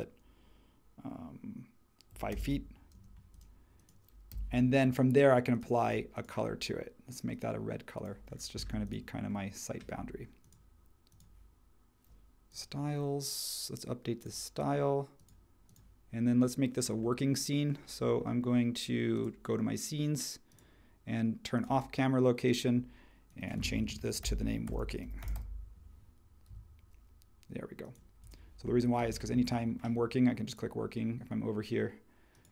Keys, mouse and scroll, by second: 1.8-2.9 typing, 4.3 b, 8.6-24.0 drag, 23.8-25.8 typing, 26.5 Tab.